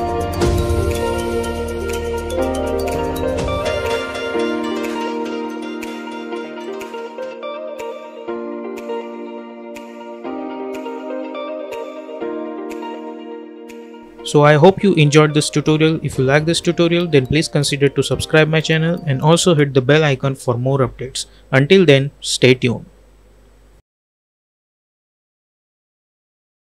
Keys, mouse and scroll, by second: 5.9 space, 6.9 click.